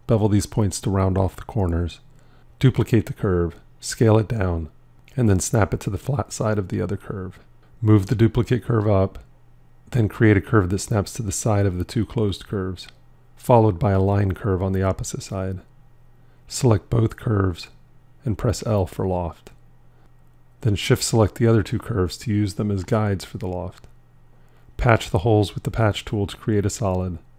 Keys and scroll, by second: 0.9 b, 19.1 l, 27.0 ctrl+2.